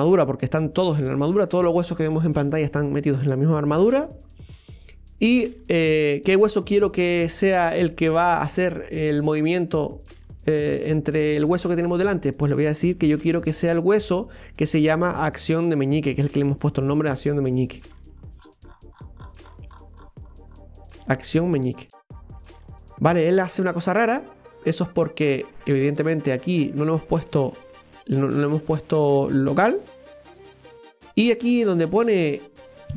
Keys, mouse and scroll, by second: 25.1-28.2 right drag.